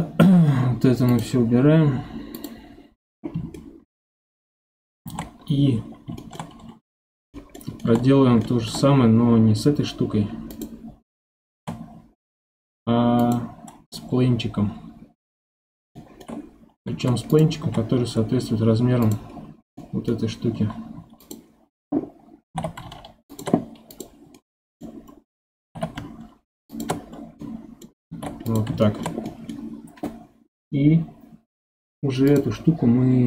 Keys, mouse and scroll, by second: 1.1 click, 3.5-5.8 middle drag, 5.8-6.2 scroll down 1, 6.2-7.3 shift+middle drag, 7.3-7.8 scroll down 1, 7.8-8.1 shift+middle drag, 8.1 scroll up 2, 8.4-10.5 shift+middle drag, 10.5 click, 11.5 shift+a, 15.2-15.6 scroll up 2, 15.6-16.9 middle drag, 16.9 ctrl+Tab, 17.6 s, 19.3 scroll up 2, 19.8-20.9 middle drag, 20.9 2, 21.2 click, 22.4 g, 23.9 click, 24.3-25.6 middle drag, 25.6 g, 27.0-27.4 scroll down 7, 27.4 middle click, 28.1 ctrl+Tab, 28.8-32.3 shift+middle drag, 32.3-33.2 drag.